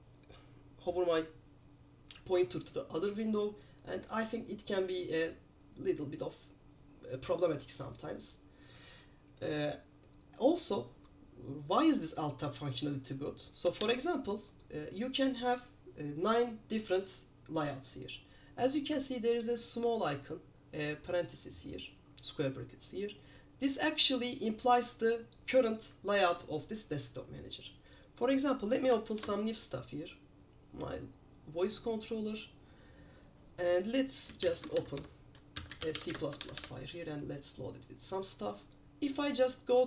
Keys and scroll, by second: 13.9 super+q, 29.3 super+F4, 34.8-37.0 typing, 35.1 Tab.